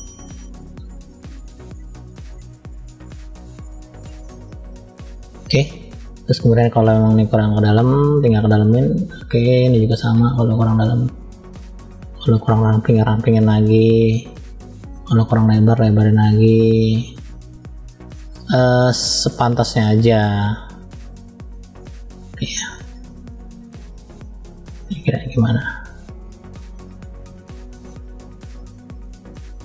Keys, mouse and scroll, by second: 0.2 click, 1.0 click, 1.6 click, 2.2 click, 2.6 click, 3.2 middle click, 4.3 shift+middle click, 5.1-5.6 scroll up 1, 6.2 scroll up 3, 6.8 click, 8.7 click, 9.6 shift+middle click, 10.5-11.8 drag, 12.4 click, 13.3 click, 15.0 click, 15.7-16.8 drag, 17.3-17.9 scroll down 1, 17.9 middle click, 17.9 scroll down 1, 18.9 click, 20.5 click, 21.8-23.3 middle drag, 24.8 click, 25.5 click, 26.3 click, 26.8 click, 27.7 click, 29.3 click.